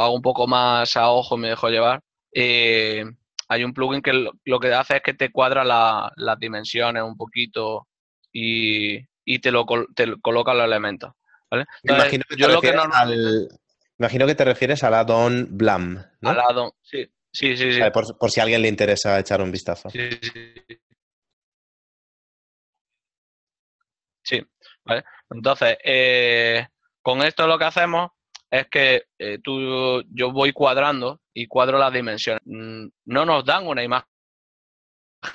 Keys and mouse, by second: 3.1 r, 10.5 g, 16.4 g, 22.2 click, 31.8 z, 34.4 click.